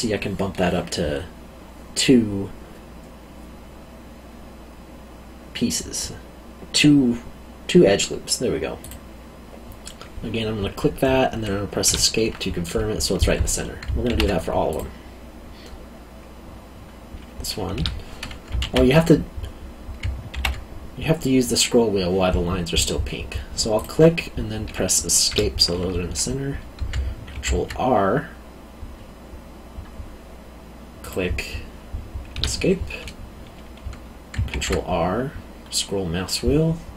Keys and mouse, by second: 8.8 click, 11.8 Escape, 14.0 ctrl+r, 14.7 click, 17.7 Escape, 18.6 ctrl+z, 20.3 ctrl+r, 23.7 click, 25.3 Escape, 27.3 ctrl+r, 31.0 click, 32.3 Escape, 34.5 ctrl+r.